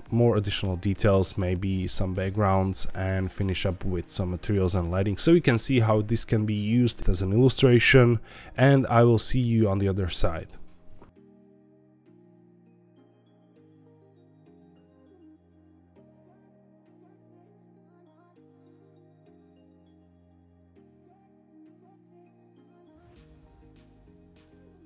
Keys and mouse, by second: 11.5 middle click, 11.6 shift+middle click, 11.8 click, 11.9 Tab, 12.1 click, 12.3 shift+s, 12.5 Tab, 12.6 shift+a, 13.5 click, 14.3 Tab, 14.4-15.7 typing, 15.0 click, 15.6 click, 16.0-17.1 drag, 17.6 shift+f, 17.6 shift+middle click, 18.0 ctrl+b, 18.8 click, 19.1-20.3 typing, 20.0 Escape, 20.1 Tab, 20.6 click, 21.5 shift+click, 23.2 ctrl+l, 23.2 click, 24.3 click, 24.7 click.